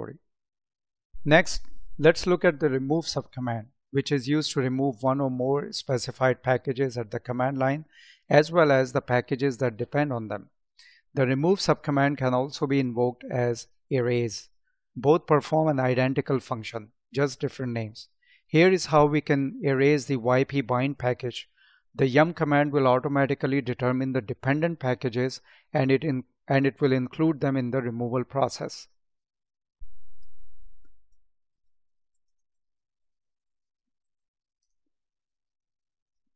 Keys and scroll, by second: 30.9 space, 32.2 space.